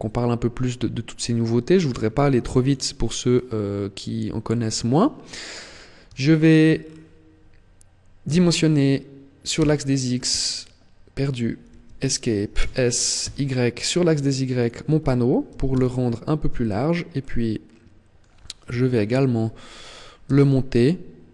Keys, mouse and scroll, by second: 0.9 click, 2.9 scroll down 3, 4.1 middle click, 5.8 shift+middle click, 6.4-7.3 scroll down 3, 7.9 s, 12.2 s, 14.3 click, 15.1 s, 16.3 click, 16.9 middle click, 18.3 KP_1, 19.9 g.